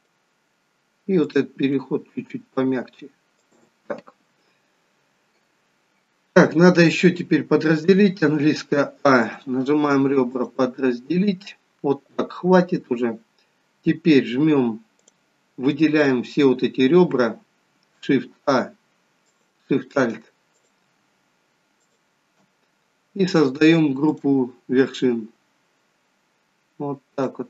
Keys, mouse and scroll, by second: 1.2 click, 1.4 g, 7.9 a, 9.2 click, 14.9 click, 19.3 alt+shift+click, 20.5 click, 21.8 alt+shift+click, 24.0 click.